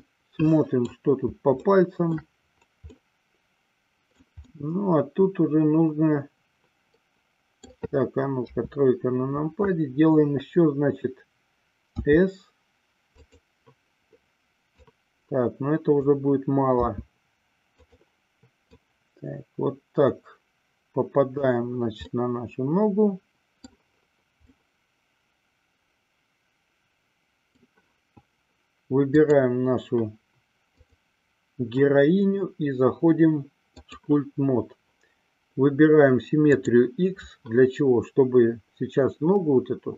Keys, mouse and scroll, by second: 0.3 middle click, 1.8-2.4 shift+middle drag, 3.3-4.5 middle drag, 4.7-7.9 middle drag, 8.5 KP_3, 12.2 s, 13.4 click, 14.9-16.3 drag, 17.0 s, 18.9-21.7 drag, 22.1-23.9 middle drag, 24.8-27.9 middle drag, 29.3 click, 30.8-34.4 drag, 36.6 click.